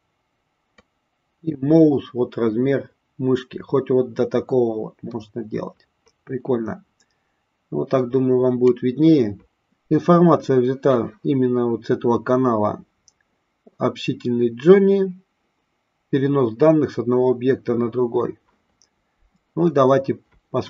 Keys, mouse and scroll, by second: 0.6-8.7 drag.